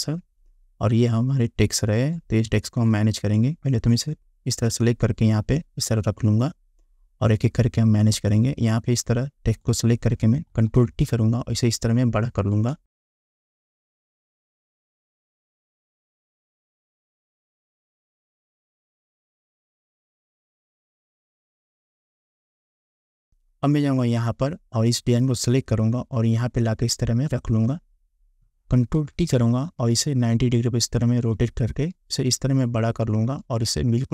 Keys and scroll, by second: 10.7 ctrl+t, 12.8 Return, 15.4 g, 15.8 ctrl+t, 17.1 Return, 17.6 Down, 18.5 s, 18.8 ctrl+t, 19.4 Return, 19.7 Up, 20.5 ctrl+h, 21.1 shift+Up, 22.2 shift+Up, 22.4 shift+Up, 23.1 Delete, 29.1 ctrl+t.